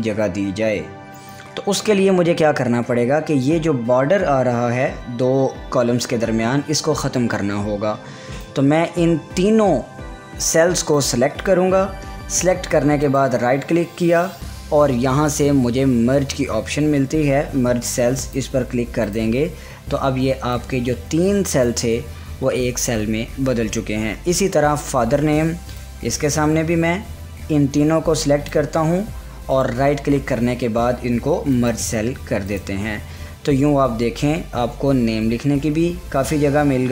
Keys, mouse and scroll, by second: 8.5-13.2 drag, 13.1 right click, 18.3-25.8 drag, 25.9-29.6 drag, 29.6 right click, 31.6 click.